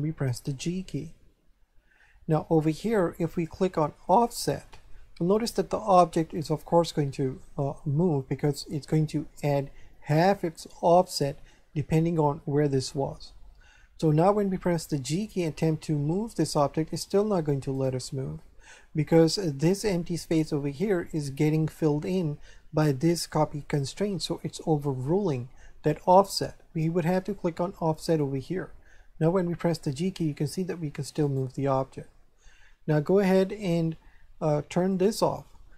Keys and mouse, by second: 4.0 click, 15.1 g, 17.7 right click, 28.0 click, 29.3 g, 31.2 right click, 34.9 click.